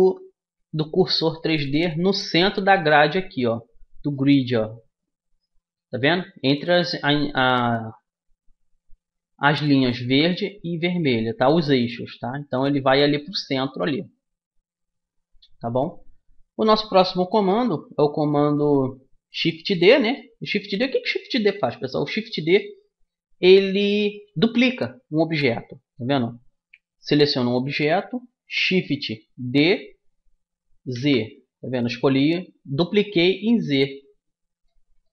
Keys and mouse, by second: 0.2 z, 17.6 z, 18.8 middle click, 25.0 right click, 25.7-27.5 middle drag, 27.5 click, 29.7 shift+d, 34.1-35.1 drag.